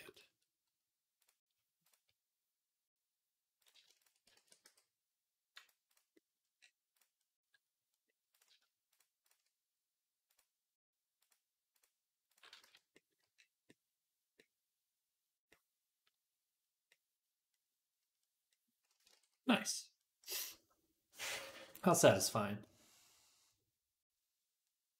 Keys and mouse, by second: 0.0 click, 0.0-9.2 middle drag, 1.1-3.5 drag, 4.2 ctrl+a, 5.4-24.9 right drag, 8.2 click, 8.8 shift+click, 10.1 click, 10.1 middle click, 11.1-12.2 drag, 11.1-12.2 middle drag, 12.5 z, 19.0 ctrl+s.